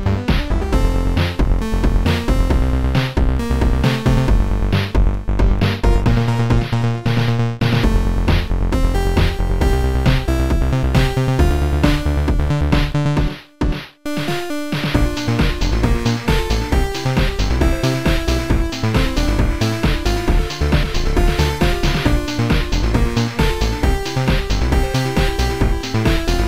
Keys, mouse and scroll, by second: 1.0 click, 2.0 click, 2.9 click, 4.2 click, 8.0 click, 9.6 right click, 11.1 click, 11.1 right click, 14.4 click, 14.4 right click, 15.5 right click, 17.6 click, 19.4 click, 20.4 click.